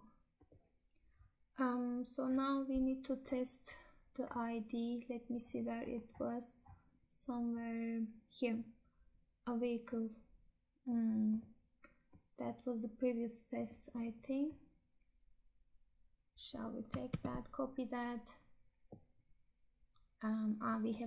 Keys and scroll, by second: 16.9 ctrl+c.